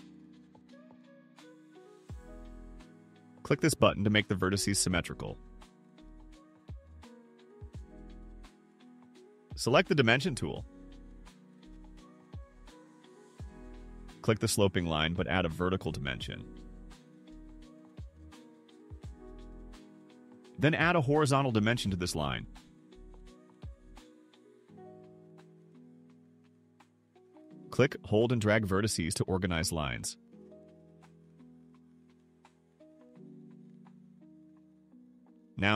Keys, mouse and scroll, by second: 5.2 click, 11.9 click, 14.0 click, 15.2 click, 16.8 3, 18.7 middle click, 18.7 scroll up 2, 20.0 click, 21.3 click, 23.1 1, 23.7 5, 24.2 0, 26.8 right click, 28.5 click, 30.2 click, 31.6 click, 32.9 click, 35.6 click.